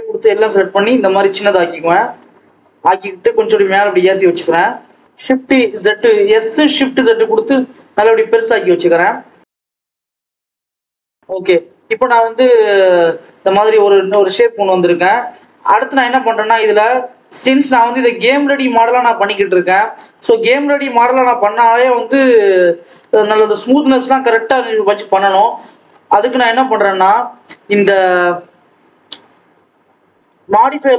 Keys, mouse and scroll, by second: 2.3-3.0 scroll up 5, 3.2 g, 5.1 scroll down 1, 5.4 KP_7, 5.8-6.1 scroll down 4, 6.1 s, 9.8 s, 11.1 ctrl+s, 11.4 scroll up 1, 11.6 Tab, 12.1 alt+a, 12.4 click, 13.8-14.3 scroll up 1, 14.3 KP_1, 14.8 Tab, 15.7 alt+z, 16.3 click, 17.1 g, 19.2 click, 20.5 g, 22.7 Tab, 23.7 click, 24.4 ctrl+s, 25.4-26.5 drag, 27.8 click, 30.1 click, 30.4 click.